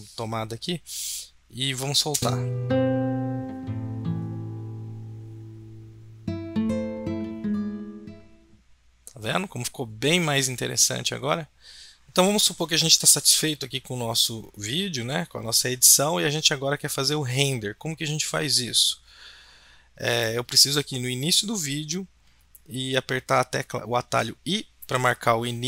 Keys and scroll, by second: 24.1 i.